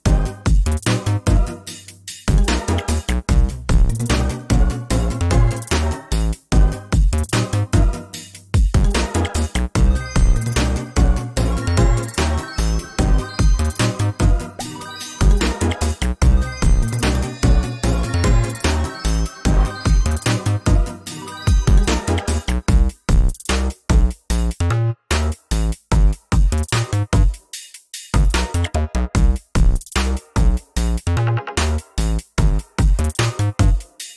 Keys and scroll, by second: 6.4 ctrl+v, 16.8 ctrl+space, 17.8 ctrl+space, 22.1 ctrl+space, 23.7 ctrl+space.